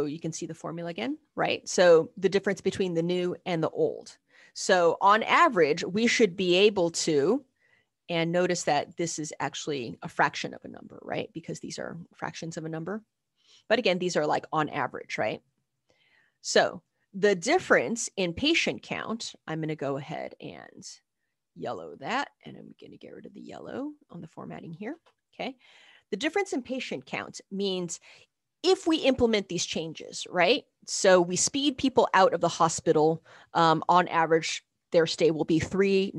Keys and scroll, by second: 0.8 typing, 7.4 Escape, 17.3 ctrl+b, 26.9 ctrl+b, 27.3 Down, 27.9 Up, 27.9 Left.